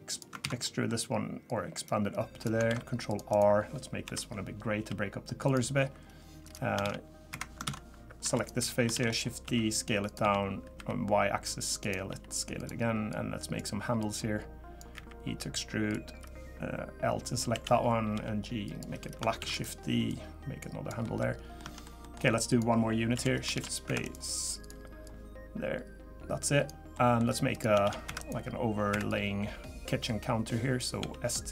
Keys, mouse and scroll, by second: 0.4 ctrl+z, 0.6 middle click, 1.5 click, 2.7 ctrl+r, 4.0 l, 4.8 g, 6.4 click, 6.8 shift+d, 7.6 ctrl+z, 8.2 3, 8.3 click, 8.9 shift+d, 9.4 s, 10.2 s, 12.1 s, 13.1 click, 14.0 click, 14.9 e, 17.5 l, 18.1 g, 19.4 shift+d, 21.0 middle click, 21.3 scroll up 2, 21.6 middle click, 22.0 middle click, 22.5 click, 23.1 l, 23.5 shift+d, 24.0 right click, 25.0 click, 26.9 middle click, 27.5 click, 27.8 shift+d, 28.2 right click, 29.1 click, 31.0 s.